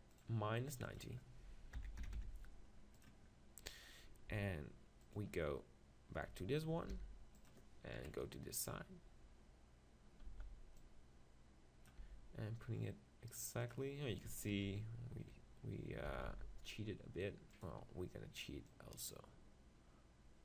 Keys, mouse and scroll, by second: 0.2-2.7 drag, 5.8-6.9 drag, 7.1 g, 7.5-9.1 drag, 8.0 KP_3, 9.1-10.3 middle drag, 10.3 z, 10.8-12.5 drag, 12.0 g, 13.7-15.4 drag, 16.1 s, 17.6-20.4 drag.